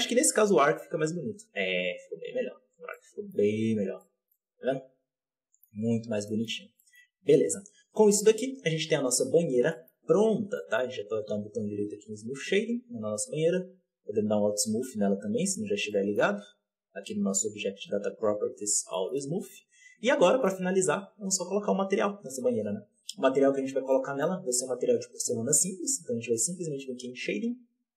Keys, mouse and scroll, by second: 2.1-2.9 scroll down 4, 2.9-3.6 middle drag, 3.6 z, 3.9-5.7 middle drag, 5.7-6.7 scroll down 7, 6.2 middle drag, 6.7-7.3 shift+middle drag, 7.3 KP_7, 7.5 KP_2, 7.7 KP_2, 8.2-9.3 scroll up 6, 9.3-9.7 scroll down 2, 9.7 shift+middle click, 9.9-10.5 scroll up 6, 10.5-11.8 shift+middle drag, 11.8 w, 12.7-14.5 scroll down 9, 14.5-15.4 scroll up 2, 15.4-15.8 scroll up 1, 15.8-16.2 middle drag, 16.2 alt+a, 18.5-18.8 scroll down 2, 18.8-27.9 shift+middle drag.